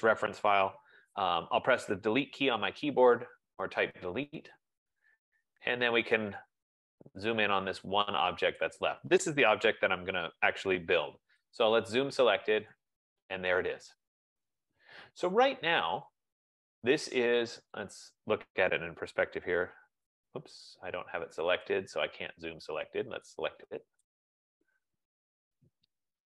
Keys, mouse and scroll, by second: 2.0-3.2 typing, 4.7-5.0 scroll, 5.8-6.2 scroll, 7.8-8.8 scroll, 8.8-9.7 scroll, 9.7 click, 9.9 Return, 11.3 s, 12.3 Return, 13.0 click, 16.0 click, 16.8 click, 17.7 click, 17.8 click, 19.3 z, 19.4 Return, 19.6 s, 20.0 Return, 21.8 click, 23.0 click, 23.6 scroll, 24.2 click, 25.5 click.